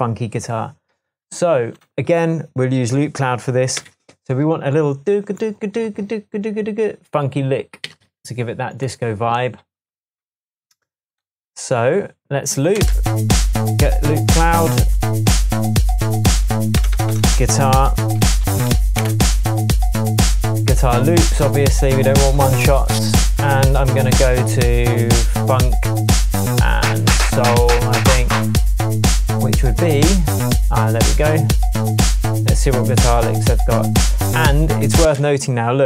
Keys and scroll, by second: 3.8 super+t, 7.9 super+s, 12.8 space, 16.8 BackSpace, 18.1-19.2 typing, 35.0 space.